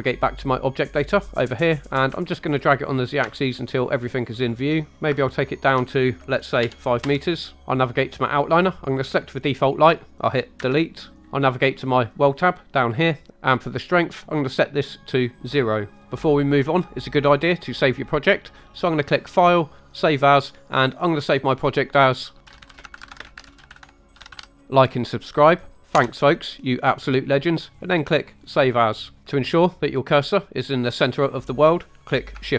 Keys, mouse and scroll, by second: 0.8 click, 2.0-4.9 shift+drag, 5.1-7.0 ctrl+drag, 9.0 click, 10.6 Delete, 12.4 click, 14.3 click, 19.2-20.3 drag, 29.3-29.7 middle drag.